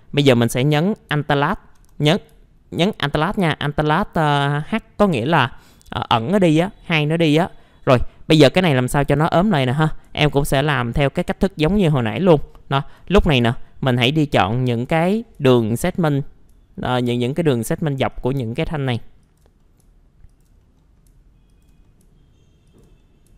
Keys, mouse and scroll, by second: 5.1 alt+h, 7.2 scroll up 1, 9.5 click, 10.5 ctrl+click, 10.9 middle click, 11.6 ctrl+click, 12.0 middle click, 12.4 alt+middle click, 13.1 alt+f, 13.4 alt+z, 13.7 middle click, 15.0 middle click, 15.7 ctrl+click, 16.2 middle click, 16.9 ctrl+click, 17.2 scroll down 1, 17.4 middle click, 18.1 ctrl+click, 18.5 middle click, 19.2 ctrl+click, 19.6 middle click, 20.3 ctrl+click, 20.6 middle click, 20.8 scroll down 1, 21.5 ctrl+click, 21.8 middle click, 22.7 ctrl+click, 23.0 middle click.